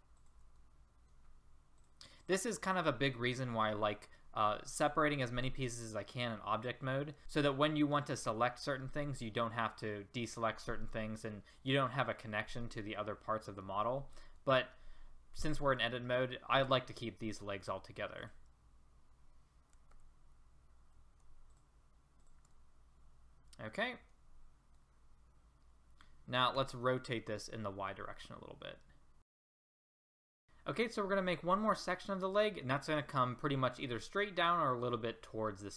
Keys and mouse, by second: 14.4-17.0 middle drag, 18.2-19.9 drag, 19.9 ctrl+z, 23.4 click, 23.5 click, 23.7 click, 23.9 click, 24.0 middle click, 24.9 middle click, 25.4 middle click, 26.6 r, 29.4 middle click, 30.3 middle click.